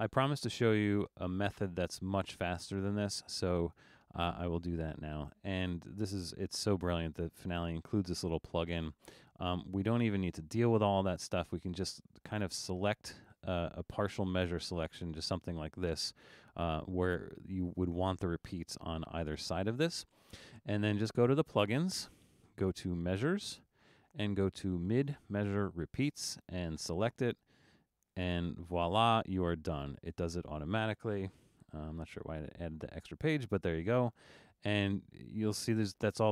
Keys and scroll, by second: 0.5 super+z, 1.4 super+z, 31.5 super+u.